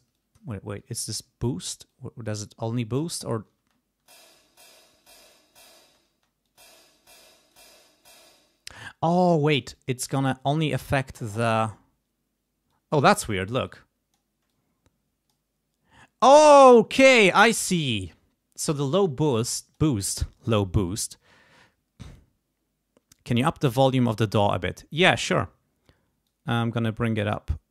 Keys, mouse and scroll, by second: 0.1 click, 0.7 click, 1.9-3.2 drag, 3.6 space, 5.0 click, 5.8 space, 6.4 click, 7.3 click, 8.2 space, 9.7 click, 11.2 click, 12.7 click, 13.6 click, 14.4-15.4 drag, 19.3 click, 26.2-27.7 drag.